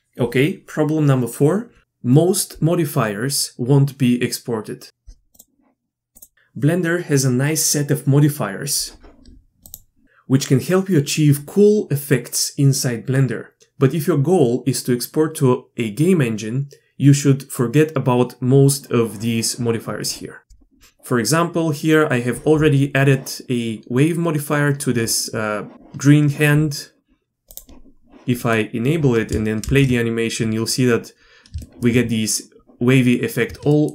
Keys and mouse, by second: 9.7-19.7 drag, 20.4 drag, 27.5-28.4 drag, 28.4-28.9 middle drag, 29.6 shift+space.